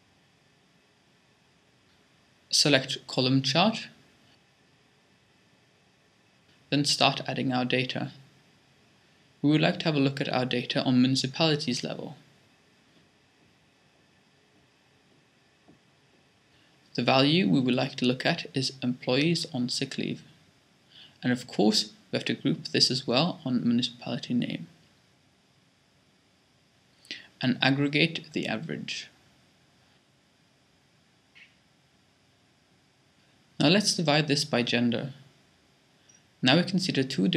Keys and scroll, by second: 0.0-0.6 typing.